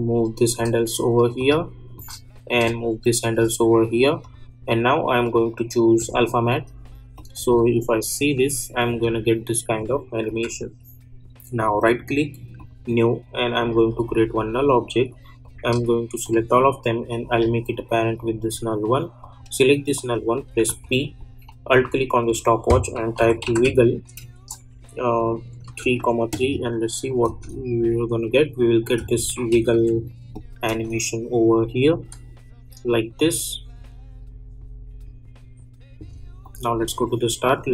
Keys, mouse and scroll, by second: 2.5-4.2 drag, 7.3 space, 9.7 click, 10.2 u, 11.5 right click, 12.5 click, 16.2-19.2 shift+drag, 20.6 p, 21.7 alt+click, 22.7-24.1 typing, 24.4 Return, 25.4-26.4 typing, 27.0 click, 27.5 space, 29.5 -, 29.7 -, 30.3 click, 30.7 space, 35.9 space, 36.4 click.